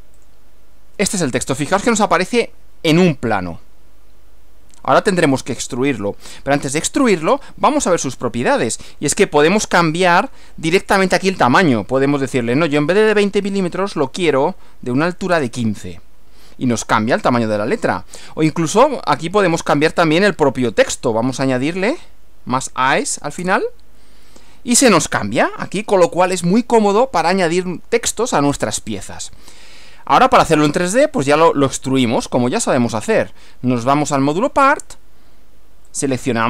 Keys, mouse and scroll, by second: 0.3 click, 3.0-5.3 middle drag, 7.2 click, 10.9 click, 13.2-14.1 typing, 15.3 Return, 18.9 click, 20.1 click, 21.9 a, 23.5 Return, 32.7 click, 33.9 click, 35.9 click.